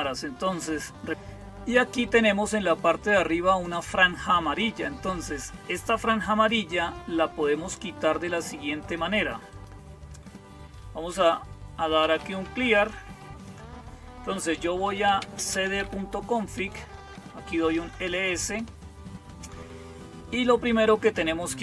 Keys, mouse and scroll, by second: 8.6 click, 9.4 click, 11.6-12.9 typing, 13.3-14.7 drag, 14.5-18.1 typing.